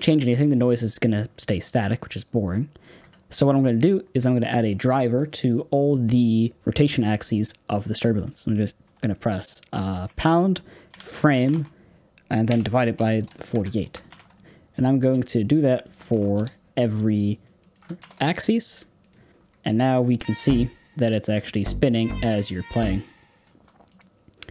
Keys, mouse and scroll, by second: 0.5-15.0 middle drag, 16.3-19.0 drag, 20.1 space, 23.4 space, 23.9-24.5 drag.